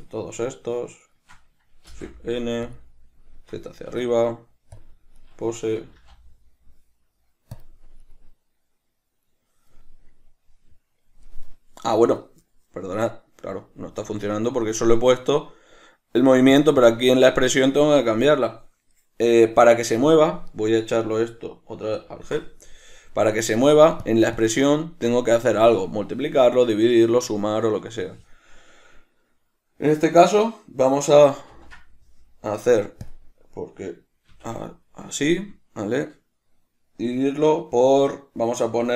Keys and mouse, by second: 0.7 shift+right click, 1.3 shift+right click, 2.2 shift+n, 5.5 right click, 6.2 g, 7.9 click, 8.3 right click, 16.8-20.8 drag, 21.2 right click, 22.3 alt+g, 23.1 right click, 24.3-38.9 drag.